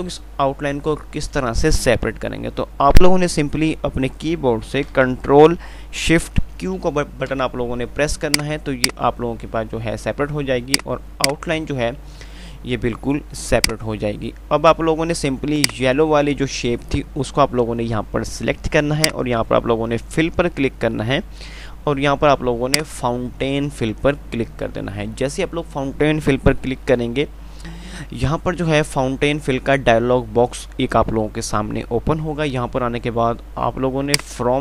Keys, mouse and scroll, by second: 5.3 ctrl+z, 7.0 ctrl+shift+q, 8.2 click, 13.8 click, 19.2 click, 23.1 click.